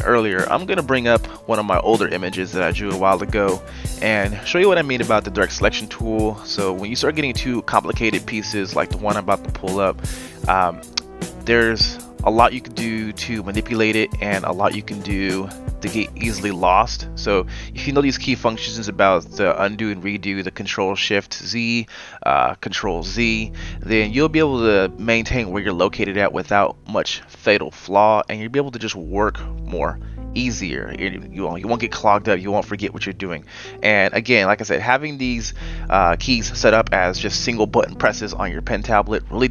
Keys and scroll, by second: 8.3 f, 8.8 f.